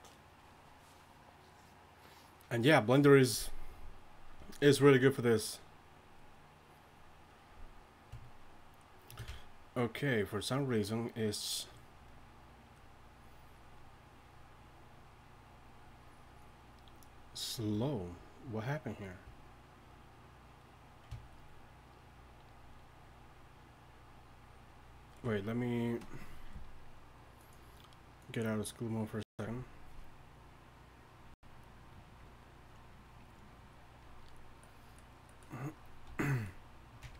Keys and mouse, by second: 36.1 a.